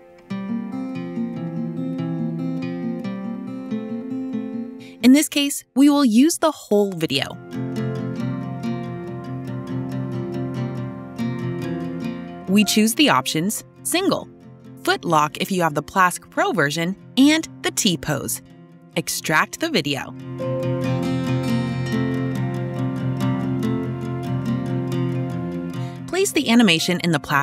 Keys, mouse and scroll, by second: 1.8 click, 1.9 click, 3.3 click, 3.8 click, 14.3-16.4 drag, 18.0 click, 19.6-22.0 typing, 23.8 click, 27.1 click.